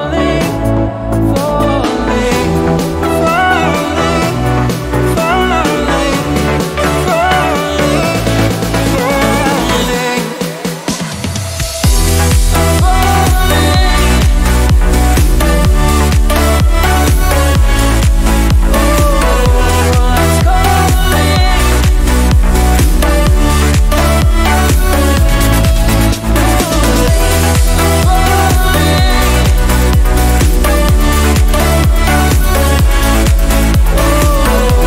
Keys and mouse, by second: 16.7 click, 17.6 click, 18.9 click, 20.5 g, 30.5-31.8 drag, 31.8-33.8 shift+middle drag, 33.8 g.